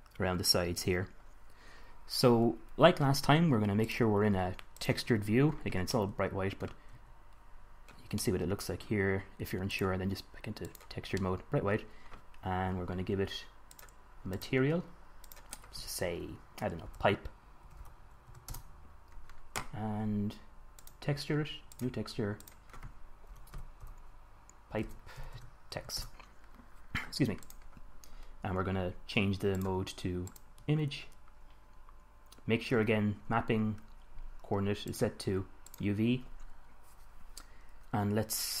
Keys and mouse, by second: 4.1 drag, 5.9 middle click, 7.1 z, 11.5 middle click, 11.7 click, 14.0-17.3 drag, 17.3 middle click, 20.3-21.0 middle drag, 21.0-24.4 drag, 24.4 middle click, 27.8-29.4 drag, 29.4 middle click, 29.8-31.6 drag, 31.6-35.2 middle drag, 35.2-36.9 drag, 36.9-38.6 middle drag.